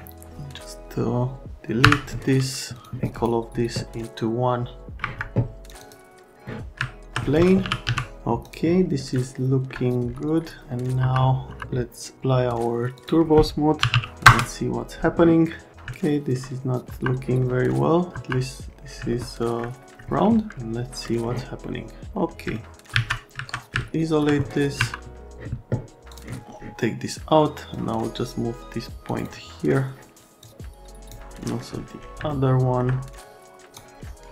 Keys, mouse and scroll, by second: 0.6 click, 1.8 Delete, 2.8 click, 3.1 right click, 5.0 Escape, 5.7 click, 6.8 alt+middle click, 7.4-8.3 typing, 8.4 click, 9.2 alt+right click, 10.6 middle click, 11.0 F3, 11.5 F3, 12.9 click, 13.6-14.4 typing, 15.5 right click, 15.9 alt+middle click, 16.9 F3, 17.4 middle click, 18.1 F3, 19.1 alt+middle click, 21.0 middle click, 22.5 alt+middle click, 22.9 alt+q, 23.8 alt+middle click, 24.7 F3, 30.4 middle click, 32.3 alt+right click, 33.1 middle click.